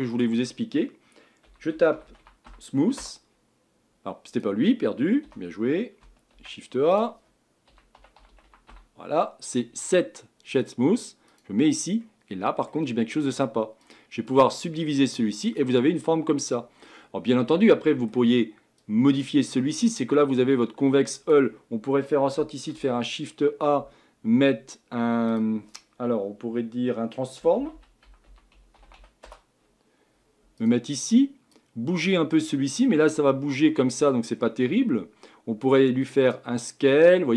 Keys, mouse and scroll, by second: 3.0 o, 5.2 Delete, 10.6 o, 12.0-13.9 middle drag, 13.9 click, 14.8-16.6 middle drag, 16.6 scroll up 1, 16.8-17.3 scroll down 5, 27.6-29.3 scroll down 1, 31.6-33.7 drag, 33.7-36.6 middle drag, 36.6-37.3 drag.